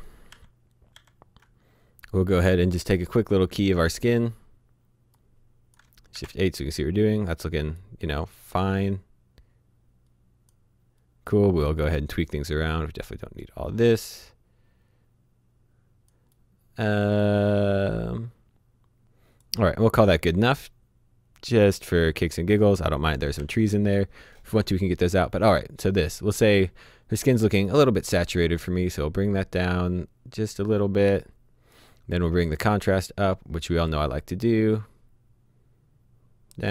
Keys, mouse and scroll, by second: 0.3-0.9 typing, 1.7-3.3 scroll up 1, 4.0 click, 6.1 h, 7.2 click, 12.5 click, 15.2-16.1 scroll down 1, 17.0 click, 19.7-21.0 scroll down 1, 21.5 click, 23.3 h, 26.0-27.4 scroll up 1, 27.4 middle click, 28.7 click.